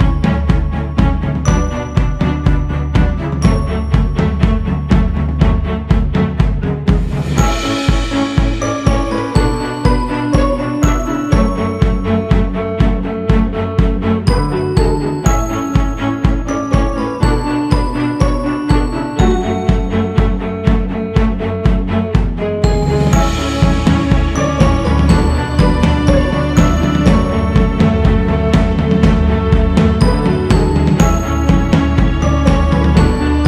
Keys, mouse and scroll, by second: 0.5 click, 1.0-1.9 scroll up 2, 2.1-2.8 scroll down 3, 2.8 click, 5.7-6.9 drag, 6.9 scroll up 2, 8.5 f, 10.5-14.7 drag, 14.7-15.2 scroll down 3, 15.8-17.5 drag, 18.2-19.9 scroll up 2, 19.9 f, 21.5-24.5 drag, 27.9-28.5 scroll down 2, 29.0-30.3 drag, 30.3-31.2 scroll up 2, 31.8-33.4 drag.